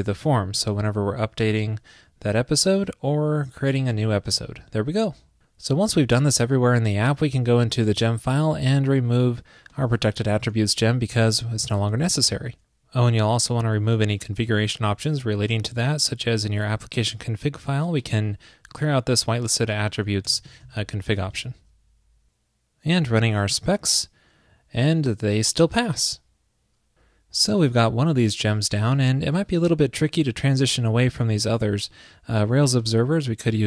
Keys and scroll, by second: 1.6 super+v, 4.1 super+v, 4.2 super+s, 10.6 super+/, 11.2 super+s, 20.6 super+s.